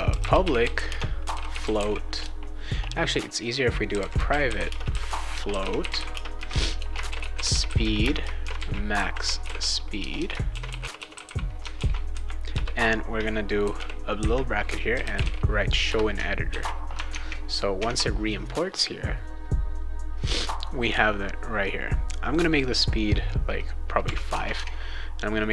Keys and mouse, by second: 0.0-11.7 typing, 11.8 ctrl+s, 12.5 Return, 13.6-15.7 typing, 15.8 Return, 16.5 ctrl+s, 17.1 alt+Tab, 17.8 alt+Tab, 22.1 click, 24.3 Tab, 24.5 Tab.